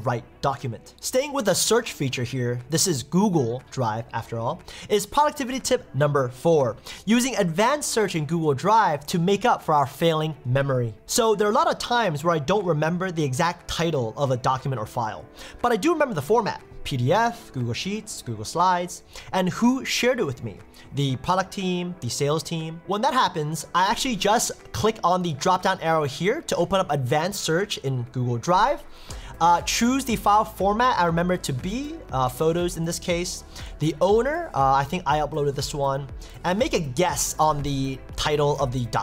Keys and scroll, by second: 14.2 typing.